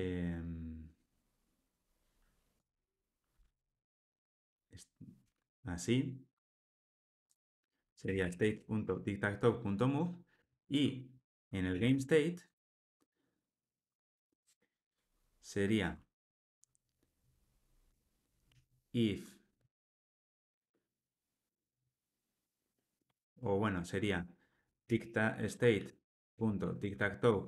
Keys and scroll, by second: 5.2 super+BackSpace, 27.3 Return.